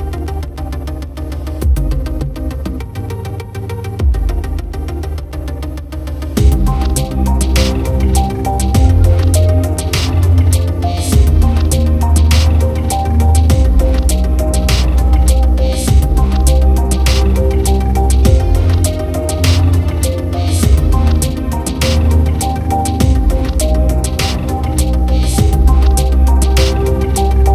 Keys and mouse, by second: 0.1 right click, 1.2 b, 1.9 right click, 2.3 right click, 2.5 right click, 3.0 right click, 3.6 right click, 4.3 right click, 4.5 right click, 5.2 right click, 5.5 right click, 6.0 right click, 7.2 right click, 7.5 right click, 7.9 right click, 8.1 right click, 8.6 right click, 9.4 right click, 10.3 right click, 10.5 right click, 12.0 right click, 13.3 right click, 14.1 right click, 14.4 right click, 14.9 right click, 15.7 right click, 16.2 right click, 17.0 right click, 17.5 right click, 17.8 right click, 18.9 right click, 21.3 right click, 22.2 right click, 22.6 right click, 23.2 right click, 24.2 right click, 24.9 right click, 25.2 right click, 25.5 right click, 25.7 right click, 26.5 right click, 26.8 right click.